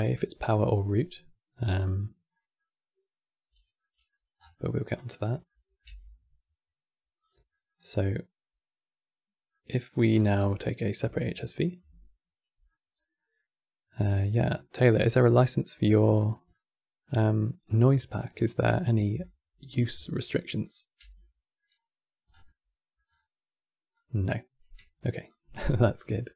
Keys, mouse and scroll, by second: 2.0-4.1 middle drag, 4.1 scroll down 6, 4.2 middle click, 4.6 click, 5.2 middle click, 5.5 g, 7.2 middle click, 7.5-8.5 scroll up 4, 9.2-9.8 middle drag, 9.8 scroll down 4, 10.0-10.8 middle drag, 10.8 alt+click, 12.4-13.6 middle drag, 13.6-16.2 drag, 16.2-18.9 middle drag, 18.9 alt+click, 20.3 click, 20.7 x, 20.9 middle click, 21.4-22.0 scroll up 4, 22.0 scroll down 4, 22.1 middle click, 22.8-23.6 scroll up 8, 23.6 click, 25.0 drag, 25.7 click.